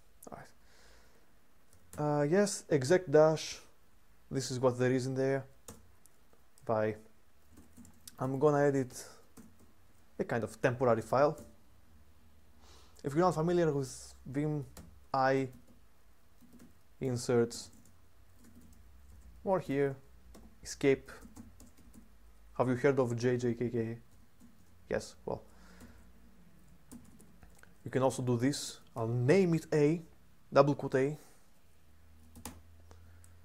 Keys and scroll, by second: 1.2-1.9 typing, 5.4 Return, 7.2-9.3 typing, 10.8-11.6 typing, 14.5-29.2 typing, 32.2 typing.